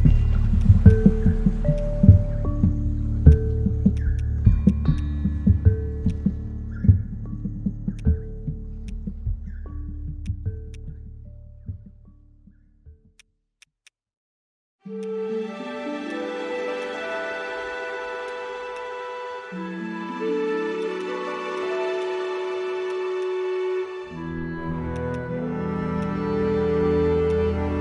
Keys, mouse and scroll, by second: 20.8 right click, 25.0 right click.